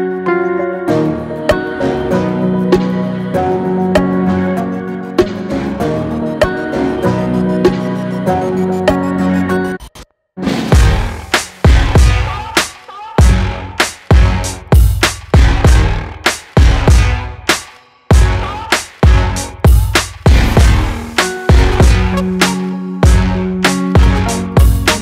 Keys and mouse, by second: 6.4 Home, 10.0 click, 11.1 click, 11.3-14.6 middle drag, 14.6 click, 15.3 middle click, 15.4 click, 22.0-23.9 middle drag, 23.9 click, 24.1-24.8 middle drag, 24.8 shift+click.